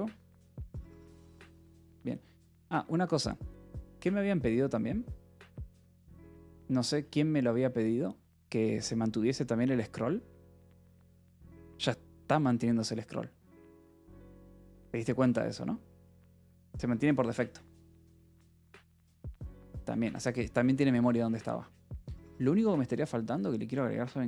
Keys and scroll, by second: 0.2 ctrl+r, 23.2 alt+l.